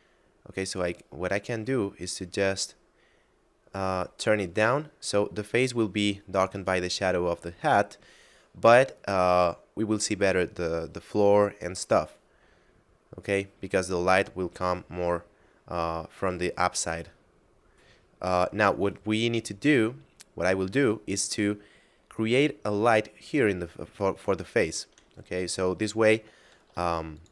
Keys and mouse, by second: 4.2 click, 7.0 middle click, 12.0 middle click, 17.4 middle click, 26.5 shift+d, 27.2 click.